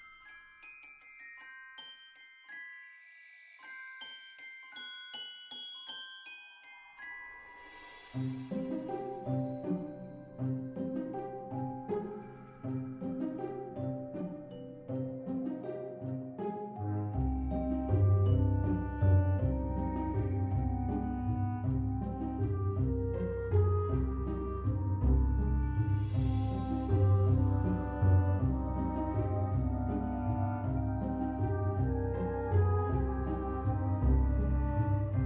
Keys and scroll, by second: 22.7 ctrl+c, 29.9 ctrl+v.